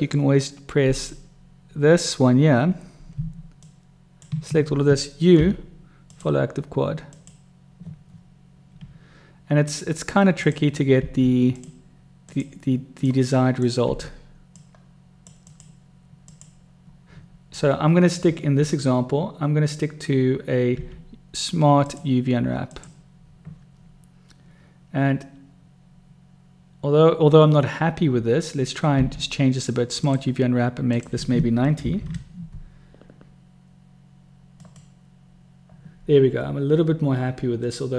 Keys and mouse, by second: 3.7 shift+click, 5.4 u, 11.0 u, 13.2 click, 13.8 u, 20.8 u, 29.0 u.